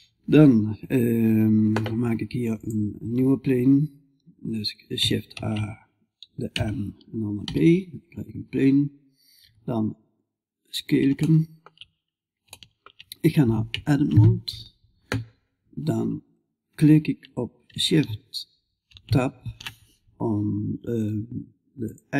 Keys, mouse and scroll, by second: 8.9 s, 10.6 click, 10.7-21.5 middle drag.